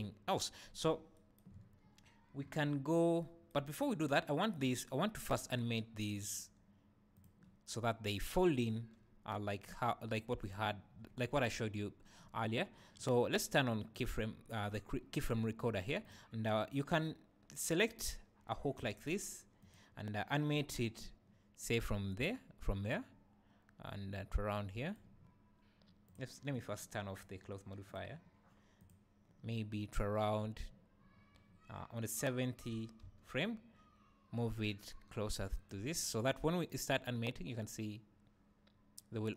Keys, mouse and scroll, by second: 1.9-2.4 scroll down 1, 2.4-2.7 scroll up 1, 3.7 scroll down 1, 4.5 click, 5.2 click, 6.1 click, 7.1 click, 13.9 click, 16.0 click, 18.8 g, 19.7 click, 23.0-26.1 right drag, 26.1 click, 27.9 click, 28.8 click, 32.6 g, 35.6 g, 35.7 click, 36.7-39.3 right drag.